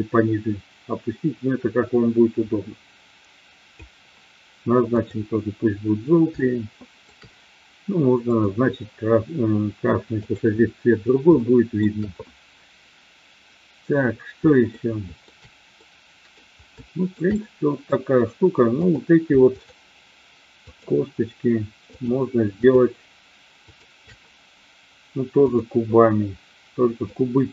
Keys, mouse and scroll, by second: 4.9 click, 6.4-7.0 shift+middle drag, 10.2 click, 11.4-11.8 shift+middle drag, 14.7-15.2 shift+middle drag, 15.8-16.3 middle drag, 16.8-17.2 shift+middle drag, 17.3-17.9 middle drag, 18.8 click, 19.4-20.3 shift+drag, 20.7-21.4 shift+drag, 21.8-23.3 shift+drag, 23.7 shift+click, 25.3 click, 27.0-27.5 drag.